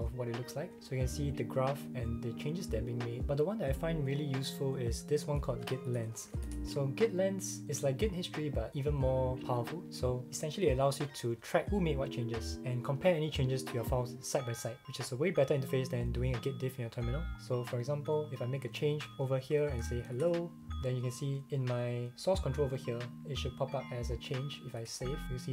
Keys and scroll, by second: 5.6-7.2 typing, 19.1-20.6 typing, 19.5 Return, 24.8 super+s.